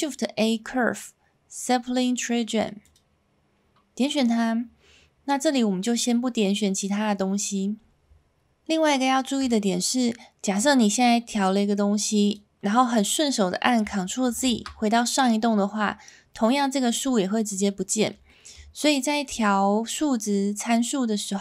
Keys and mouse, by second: 10.5-12.3 drag, 14.3 ctrl+z, 16.4-17.8 middle drag, 18.2 shift+middle drag.